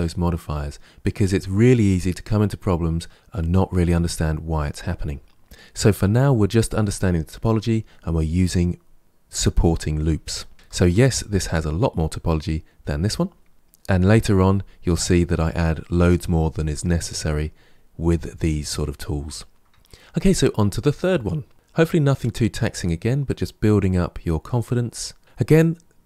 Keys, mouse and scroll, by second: 10.5 Tab, 19.5-20.3 middle drag.